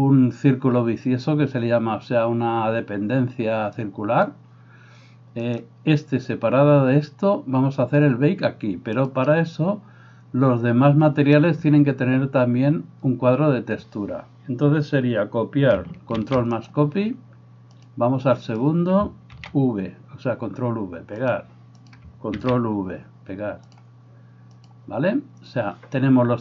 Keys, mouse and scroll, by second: 3.9-9.1 drag, 5.0 middle click, 5.0 right click, 7.3-9.1 middle drag, 7.3-16.6 right drag, 16.1 ctrl+c, 16.6-17.8 drag, 18.0 right click, 19.5 ctrl+v, 20.1-21.4 drag, 22.0-23.7 drag, 24.6-26.4 drag.